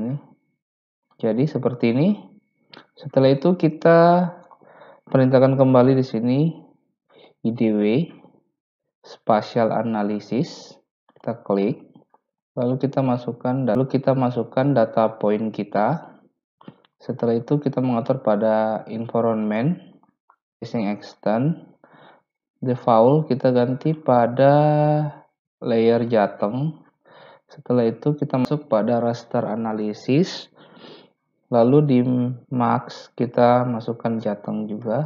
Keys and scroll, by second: 5.2-6.3 typing.